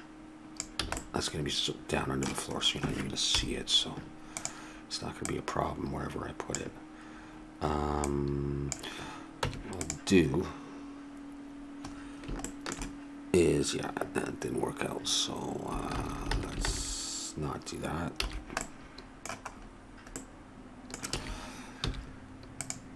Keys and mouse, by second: 0.4 middle click, 0.8 a, 3.3 KP_7, 4.4-8.7 right drag, 9.8 Tab, 15.9 ctrl+z, 16.3 ctrl+z, 16.6 ctrl+z, 18.1 a, 21.0 a, 21.8 w.